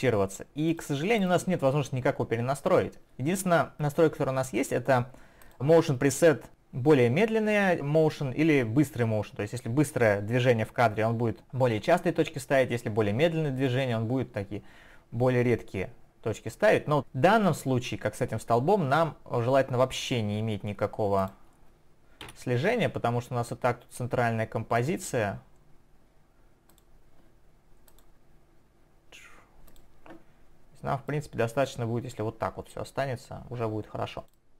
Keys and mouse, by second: 0.7 click, 1.3 double click, 23.3 Delete, 24.8 click, 26.7 click, 27.9 click, 29.7 click, 31.1 click, 34.4 click.